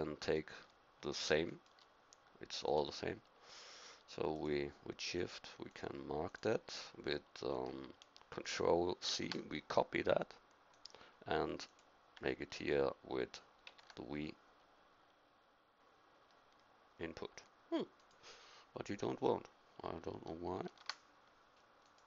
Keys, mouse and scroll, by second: 9.0 ctrl+c, 13.6 ctrl+v, 17.9-20.6 drag, 20.6 ctrl+c, 21.8-22.0 drag.